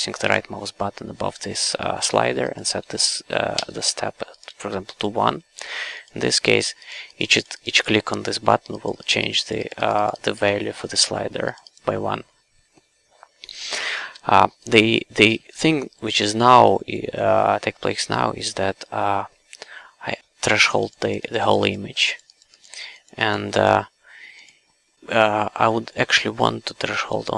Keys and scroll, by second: 3.5 1, 14.1 q, 16.2 q.